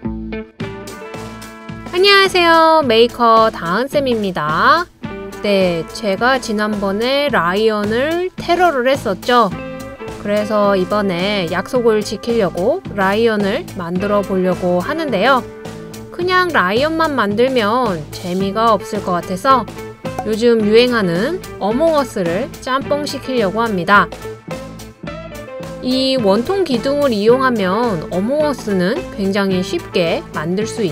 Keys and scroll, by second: 2.9 super+c, 3.1 super+v, 5.7 super+c, 5.9 super+v, 17.0 super+c, 17.2 super+v.